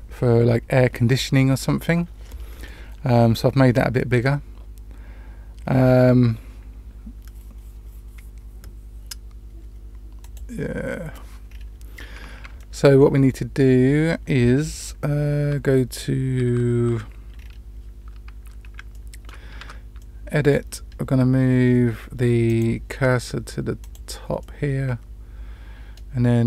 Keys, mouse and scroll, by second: 10.1 click, 11.4-11.8 scroll up 2, 12.5-12.9 shift+middle drag, 17.3-18.7 scroll up 3, 18.8-19.2 shift+middle drag, 19.5 Tab, 19.9-20.4 middle drag, 22.4 click, 23.7 click, 24.3-25.9 middle drag.